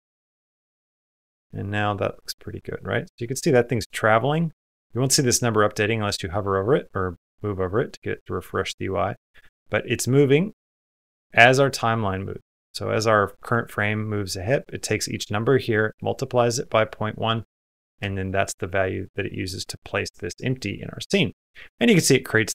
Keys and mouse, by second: 0.7 space, 22.0 middle click.